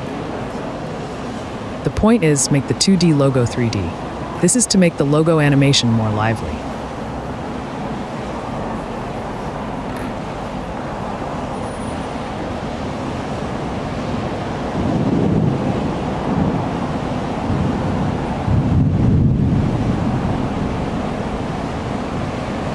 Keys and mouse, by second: 0.1-2.6 typing, 0.8 click, 1.3 shift+Tab, 1.9 click, 2.2 Tab, 2.3 click, 2.9 Tab, 3.1 click, 3.4 Tab, 3.9-6.1 typing, 6.0 Tab, 6.4 Tab, 6.6 click, 6.7 Delete, 7.3 /, 7.4 /, 7.6 click, 7.9 Tab, 8.6 middle click, 10.7 /, 10.8 /, 11.1 click, 12.1 alt+shift+click, 12.4 alt+shift+click, 12.8 f, 13.1 a, 14.4 g, 14.4 z, 15.6 shift+click, 15.8 click, 16.2 e, 16.2 z, 16.4 click, 16.5 f, 16.8 shift+click, 17.0 shift+click, 17.2 f, 17.8 shift+click, 18.1 shift+click, 18.3 f, 18.4 click, 18.7 click, 18.9 Delete, 19.4-20.9 typing, 19.9 right click, 20.6 click, 21.2 Tab, 21.5 click.